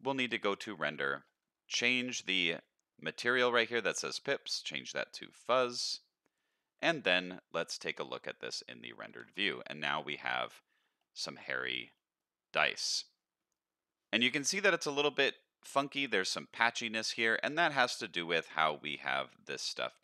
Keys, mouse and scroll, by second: 0.5 click, 1.0-1.4 scroll down 2, 4.0-5.5 drag, 7.3 z, 9.2 alt+a, 9.6 scroll up 1, 9.9 middle drag, 11.0-11.3 middle drag, 11.6 scroll down 1, 11.9 middle drag, 12.6 middle drag, 14.2 middle click, 16.8-20.0 scroll down 9.